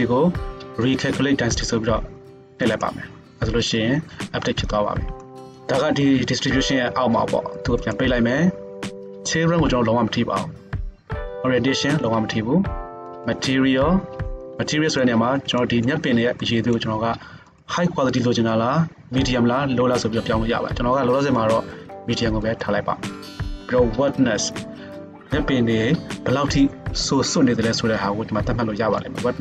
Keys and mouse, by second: 7.9-13.1 middle drag, 13.1-29.4 drag.